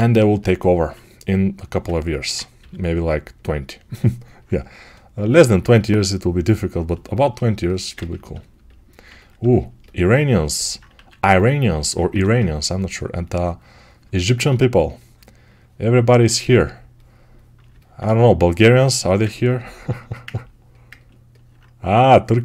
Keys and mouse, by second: 2.4 g, 3.8-22.4 alt+right drag, 10.8 1.